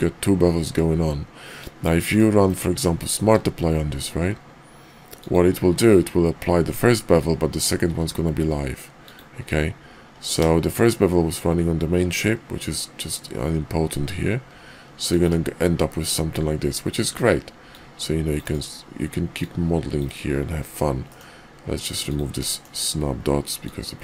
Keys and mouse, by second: 3.1 q, 7.8 q, 17.6-18.5 drag, 19.4-20.1 drag, 21.1 middle click, 22.0 click, 22.5 shift+drag, 23.6-24.0 drag.